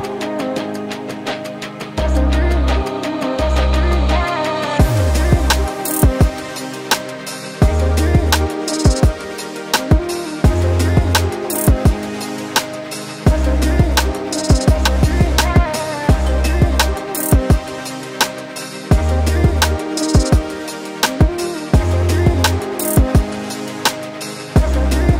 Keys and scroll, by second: 6.7 Up, 9.9 Down, 10.9 Up, 14.1 Delete, 16.7 ctrl+t.